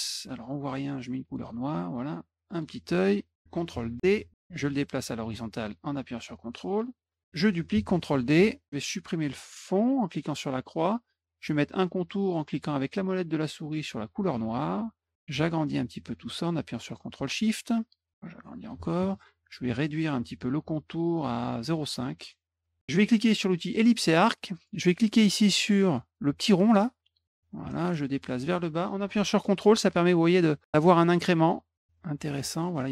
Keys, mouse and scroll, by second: 0.7 click, 2.0 click, 2.9 click, 3.5 ctrl+d, 4.0-6.2 ctrl+drag, 7.4 ctrl+d, 7.7-8.6 drag, 9.7 click, 13.7 middle click, 15.2-16.6 ctrl+shift+drag, 17.8 click, 19.8 right click, 21.1 click, 23.2 click, 25.9-32.2 drag.